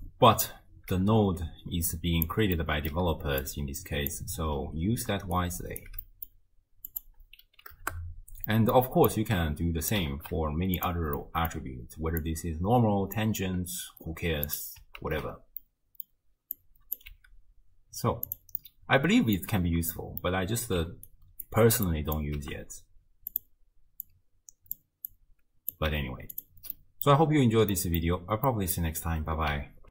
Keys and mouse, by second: 0.0-2.3 drag, 2.6 middle click, 3.1-4.5 d, 3.4 right click, 5.1 d, 5.4 click, 5.9 d, 6.2 middle click, 6.9 click, 8.6 middle click, 9.3 click, 10.1 ctrl+shift+d, 11.3 middle click, 12.5 right click, 15.1 ctrl+x, 15.7 click, 16.6 right click, 17.4 g, 18.7 middle click, 19.9 middle click, 20.8-21.7 d, 21.1 click, 21.9 drag, 22.4 g, 24.3 click, 25.1-25.8 right drag, 25.9 g, 26.9 click, 27.9 click, 28.5 click.